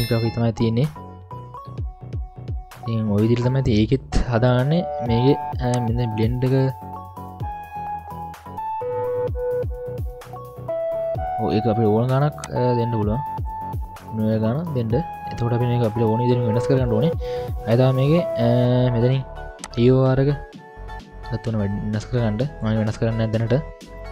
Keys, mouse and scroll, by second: 0.6-1.0 scroll up 2, 1.0-1.9 middle drag, 1.7-3.3 scroll down 2, 4.7 middle click, 5.7-9.5 drag, 9.7 scroll down 3, 9.9 scroll up 1, 10.0-11.5 middle drag, 12.4-13.5 drag, 14.0-14.4 scroll down 2, 14.4-15.0 scroll up 2, 14.5-15.1 middle drag, 15.9 middle click, 15.9 scroll down 1, 16.3-16.9 scroll up 1, 19.6-22.6 drag, 23.9 middle click.